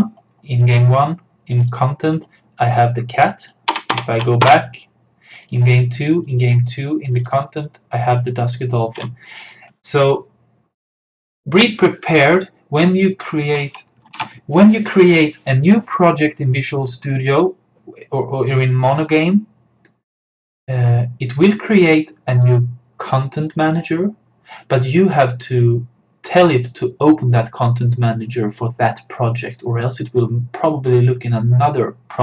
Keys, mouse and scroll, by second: 3.7 BackSpace, 5.5 click, 9.0 BackSpace, 14.1 BackSpace, 14.2 super+d.